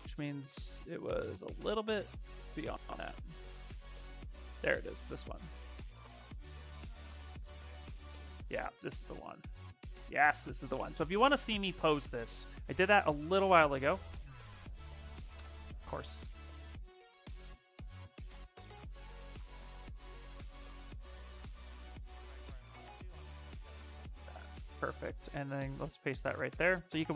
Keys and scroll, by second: 13.8 ctrl+c, 17.5 ctrl+z, 18.3 ctrl+a, 25.8 ctrl+v, 26.2 Return.